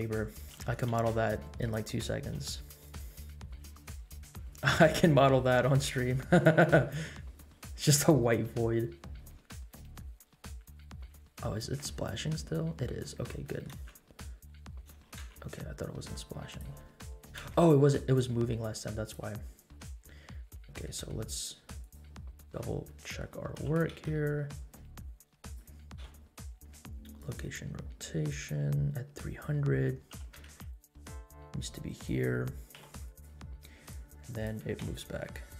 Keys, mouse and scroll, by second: 0.5 g, 2.3 r, 3.9 scroll up 2, 4.9-5.2 scroll up 1, 4.9 space, 6.2 scroll down 1, 7.3 scroll down 1, 10.2 scroll up 2, 11.1 space, 11.4 middle click, 11.9 scroll up 2, 12.2 middle click, 12.5 scroll down 1, 12.8 middle click, 13.1 scroll up 1, 13.4 middle click, 13.8 space, 15.0 space, 15.3 space, 16.5 click, 17.4 space, 18.3-19.5 drag, 19.5-20.6 scroll down 6, 21.8 click, 22.8 middle click, 23.6 g, 25.9 i, 28.4-29.8 drag, 30.1 g, 32.7 i, 33.8-34.5 drag, 34.8 shift+d.